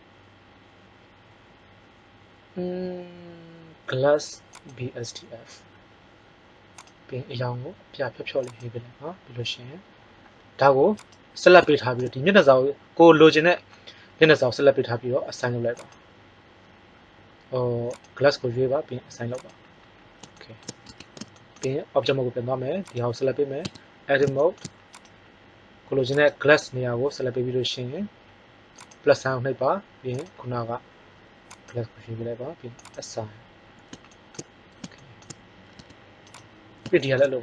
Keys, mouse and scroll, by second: 10.9-12.4 middle drag, 15.7-17.7 drag, 17.9 click, 20.9 Tab, 23.6 Tab, 35.7 Tab, 36.2 right click.